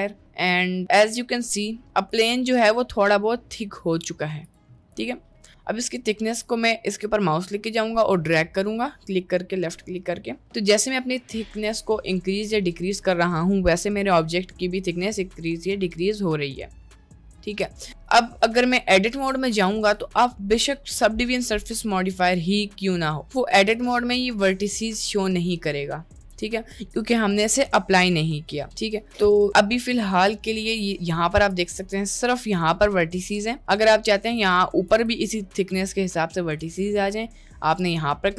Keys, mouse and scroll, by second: 0.2 middle click, 1.4-1.9 middle drag, 2.1 click, 2.5 middle click, 3.7 middle click, 6.4-17.9 drag, 17.9 middle click, 18.1 click, 18.3 Tab, 18.8 middle click, 19.5 click, 19.9 middle click, 23.2 middle click, 23.9-25.3 drag, 25.9-26.3 middle drag, 31.1 middle click, 31.9 g, 33.3 middle click, 34.3 Tab, 34.9 Tab, 36.7 Tab.